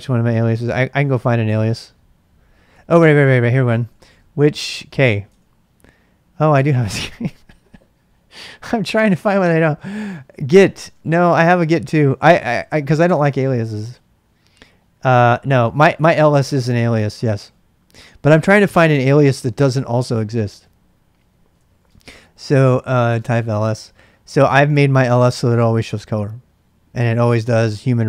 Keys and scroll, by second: 0.2-5.2 typing, 9.3-12.8 typing, 13.0 Return, 21.2-23.9 typing.